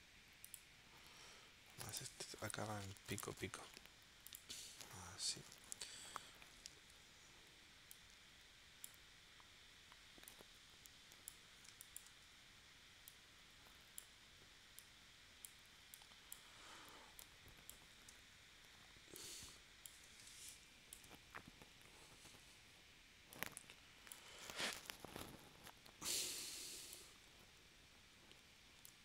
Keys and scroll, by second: 6.5 shift+w, 11.7 space, 20.2 space.